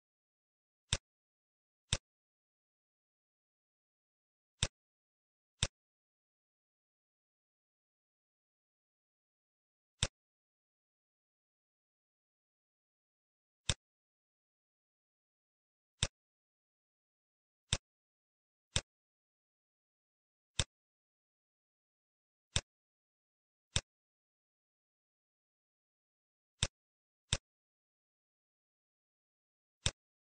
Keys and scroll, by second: 12.4 Return, 25.0 9.